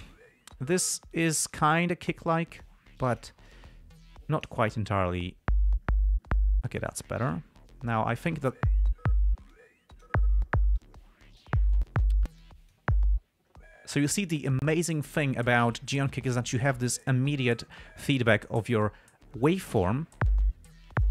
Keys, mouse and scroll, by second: 1.5 click, 2.7 click, 3.3 click, 3.8-5.0 drag, 7.6-9.0 drag, 9.8 click, 11.1 click, 12.7 click.